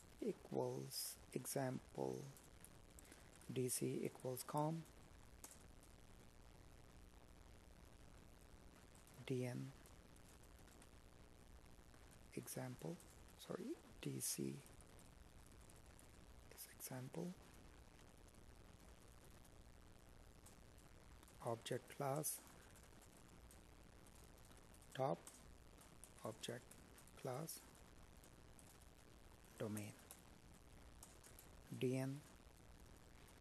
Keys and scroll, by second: 1.3 space, 5.1 Escape, 6.4 space, 7.6 space, 15.2 space, 19.6 space, 23.7 space.